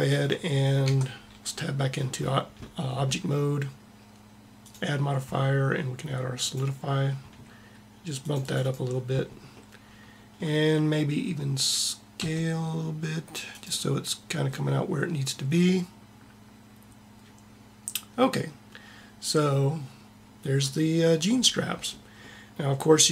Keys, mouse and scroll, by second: 0.8 Tab, 4.8-6.4 drag, 8.2-10.4 drag, 10.4 middle click, 12.3 s, 22.3 middle click.